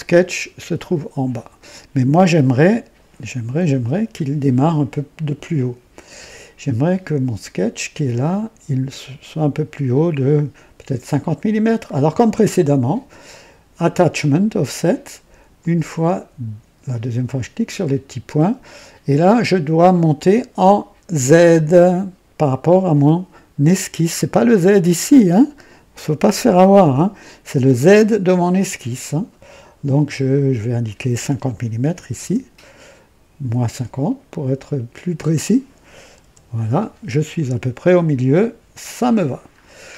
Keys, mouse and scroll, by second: 2.6-3.2 right drag, 3.7 KP_2, 6.1 &, 11.6 click, 15.5 click, 17.3 click, 30.3 click, 31.8 KP_5, 32.1 KP_0, 35.1 click, 36.2 KP_Subtract, 37.1-37.4 scroll up 1, 38.8 click, 39.5-39.9 scroll down 1.